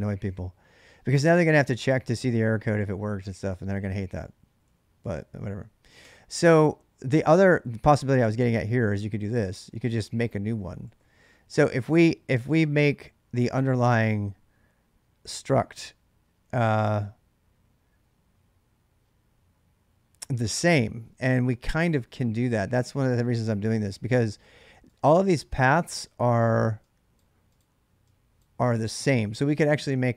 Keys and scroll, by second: 0.0-1.2 typing, 0.1 ctrl+[, 3.2 ctrl+[, 3.4-4.4 typing, 5.8 typing, 7.9-11.2 typing.